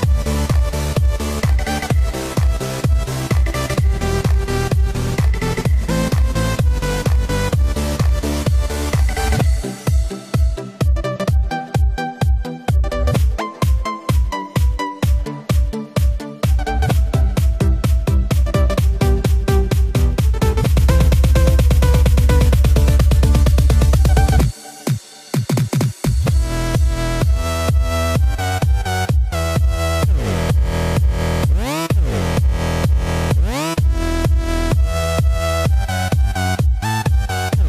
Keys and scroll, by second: 12.4 Escape, 14.1 alt+super+z, 14.9 alt+super+z, 16.0 alt+super+z, 17.3 super+t, 32.9 super+z.